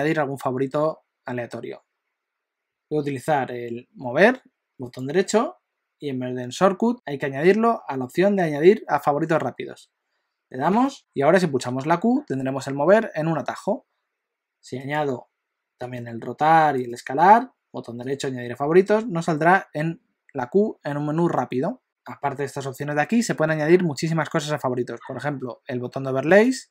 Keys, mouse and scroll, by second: 4.8 right click, 11.0 right click, 11.5 q, 14.8 right click, 16.7 right click, 18.8 q, 26.3 right click.